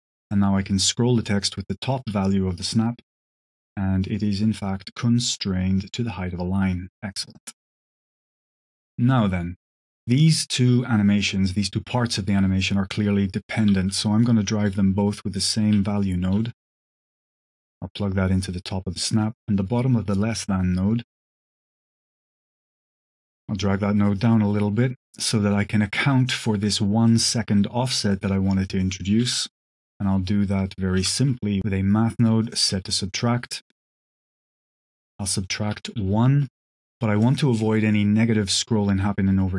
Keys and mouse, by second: 0.1 click, 1.8-7.4 drag, 7.7 click, 8.2 drag, 9.1 click, 13.5 q, 17.2 q, 17.5-18.5 drag, 19.2-20.2 drag, 22.9 click, 24.0 click, 25.0 click, 26.9 click, 27.4 click, 28.0 click, 28.5 click, 29.1 g, 30.4 click, 30.9 q, 31.6 ctrl+x, 31.6 shift+a, 32.4 click, 33.2 drag, 33.9 click, 35.2 click, 36.3-37.1 drag, 37.4 click.